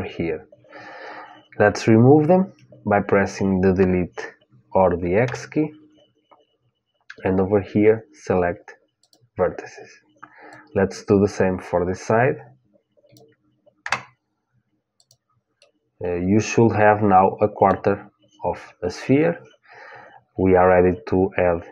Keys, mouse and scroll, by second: 5.0 Delete, 10.2-12.8 drag, 13.5 Delete, 15.3-17.4 middle drag.